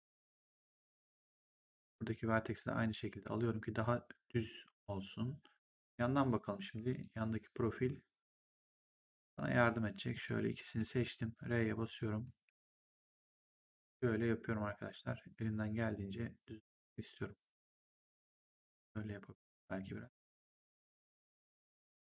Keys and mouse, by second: 1.7 click, 6.0 right click, 10.0 click, 10.8 r, 11.5 click, 12.4 w, 13.4 click, 16.6 click, 20.3 click, 21.6 click.